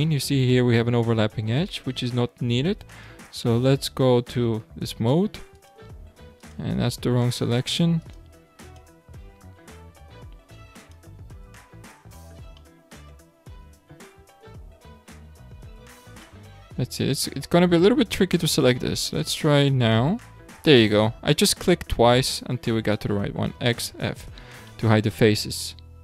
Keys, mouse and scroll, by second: 3.0 click, 5.5 alt+click, 6.4 alt+click, 7.1 alt+click, 8.0 alt+click, 8.6 alt+click, 10.8 alt+click, 11.6-12.6 scroll down 3, 12.6-13.7 shift+middle drag, 13.7-15.6 scroll down 2, 15.6-16.2 scroll up 2, 16.2 shift+middle click, 16.9-18.2 scroll up 5, 18.2-19.2 middle drag, 19.2 alt+click, 19.8 alt+click, 23.5 x, 24.3-24.7 scroll down 3, 24.7-25.7 middle drag, 25.7 Tab.